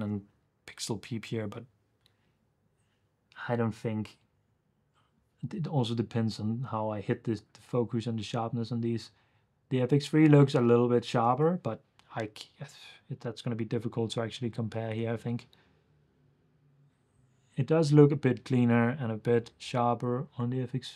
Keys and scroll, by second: 0.0 super+f, 15.0 super+f, 18.0 super+f.